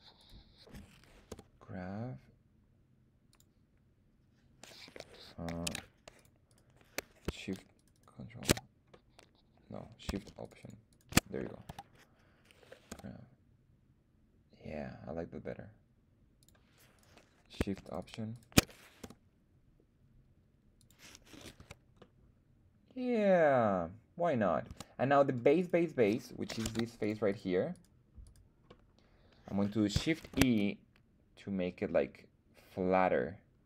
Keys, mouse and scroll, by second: 0.1 click, 0.1 right click, 1.3 g, 3.3 click, 5.6 ctrl+Tab, 6.4 right click, 7.7 ctrl+shift+right click, 7.9 ctrl+shift+click, 8.9-10.4 middle drag, 10.4 alt+shift+click, 10.4 alt+shift+right click, 10.4 alt+shift+middle click, 10.6 alt+shift+click, 10.9 alt+shift+middle click, 11.6 KP_1, 12.9 g, 16.4 click, 16.9 right click, 17.8 alt+shift+click, 17.8 alt+shift+right click, 17.9 alt+shift+click, 18.3 alt+shift+click, 19.0 g, 20.7 click, 21.5 Tab, 21.9-24.6 middle drag, 24.7 Tab, 25.1 middle click, 25.3 scroll down 1, 25.5 click, 25.5 right click, 26.6 ctrl+Tab, 27.2 click, 27.2 right click, 27.7 click, 27.7 right click, 28.2 click, 28.2 right click, 28.6 middle click, 30.2 shift+e.